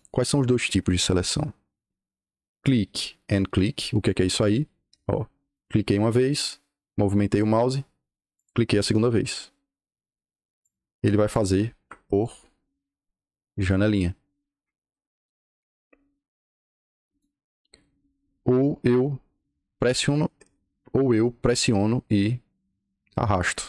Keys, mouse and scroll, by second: 2.5 click, 3.9 click, 5.4 click, 8.2 click, 10.6 click, 12.0 click, 12.4-13.3 scroll up 2, 13.6 click, 14.5 Escape, 15.2 o, 15.5 Return, 17.0 click, 19.3 click, 23.5 click.